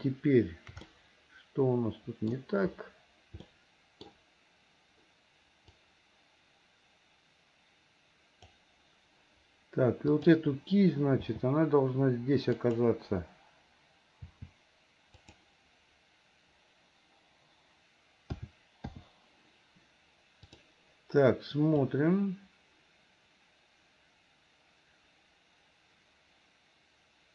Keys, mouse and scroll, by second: 0.9-2.4 middle drag, 3.5 middle click, 5.8-8.7 drag, 10.1 click, 11.2 g, 18.4 a, 19.0 i, 20.4 click, 21.9-27.3 drag.